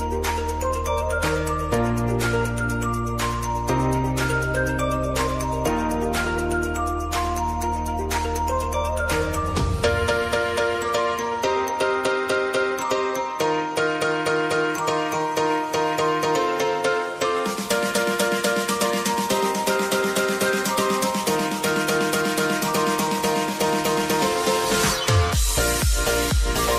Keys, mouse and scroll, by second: 4.9-7.5 drag, 7.5 click, 10.2 ctrl+alt+Home, 11.7 click, 14.3 s, 14.9-17.2 drag, 20.3-22.0 drag, 25.6-26.7 drag.